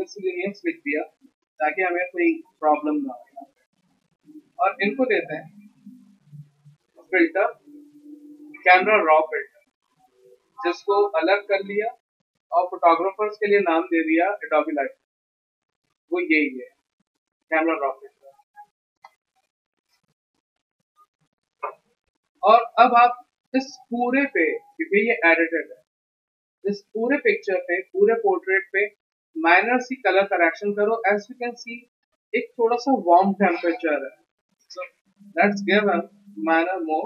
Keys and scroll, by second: 0.0-1.6 typing.